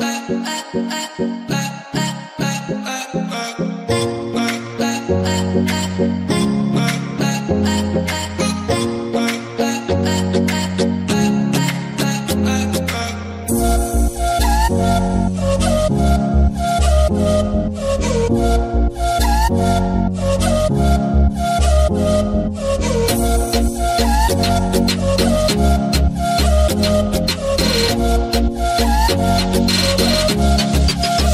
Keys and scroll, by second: 2.2 typing, 2.6 Return, 3.9 c, 8.8-10.3 typing, 23.8 Delete, 24.3 c, 28.6 8, 29.0 Return.